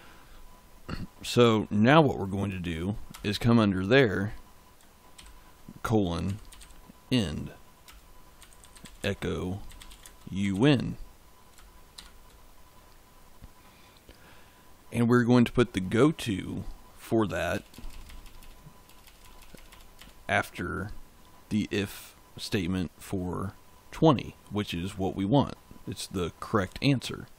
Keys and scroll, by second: 3.0 Return, 5.0-7.0 typing, 7.7 Return, 8.0-11.8 typing, 17.4 BackSpace.